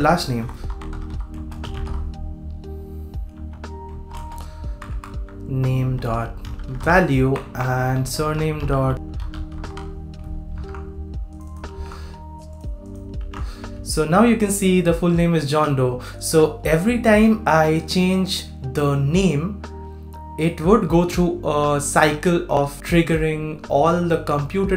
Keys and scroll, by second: 10.5 super+s, 11.7 super+c, 13.2 super+v.